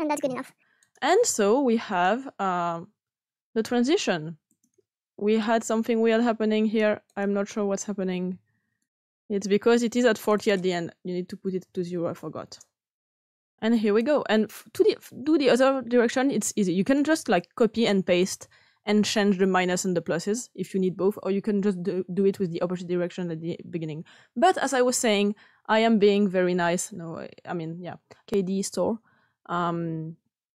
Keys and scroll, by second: 11.7 ), 12.3 Return.